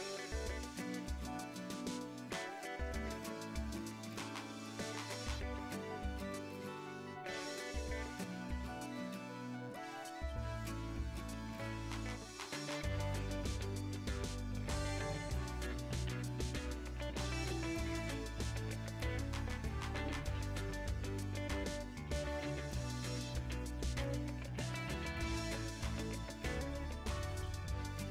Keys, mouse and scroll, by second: 0.3 middle click, 0.5 click, 0.6 middle click, 0.9 KP_7, 1.5-2.7 ctrl+right drag, 2.7 middle click, 2.8 Tab, 3.2 Tab, 3.6-6.1 drag, 6.1 Escape, 7.7 g, 9.2 click, 9.4 ctrl+r, 10.0 alt+click, 10.3 s, 11.2-14.8 middle drag, 11.4 s, 14.8 alt+shift+click, 15.0 middle click, 15.4 3, 15.4 alt+click, 16.2 middle click, 17.1 shift+click, 18.0-20.4 middle drag, 18.3 s, 20.4 2, 20.5 alt+click, 20.7-22.7 middle drag, 21.0 s, 22.7 1, 22.8 click, 23.2 ctrl+b, 23.7 click, 23.9 ctrl+b, 24.2 click, 24.7 ctrl+b, 25.1 click, 25.3 middle click, 25.5 g, 25.7 click, 26.1 ctrl+b, 26.4 click, 26.7 ctrl+b, 27.2 click, 27.6 ctrl+b.